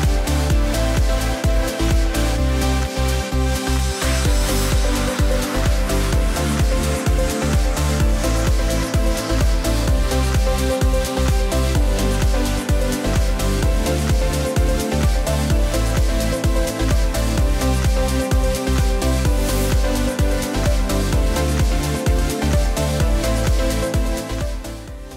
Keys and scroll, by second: 24.4 space.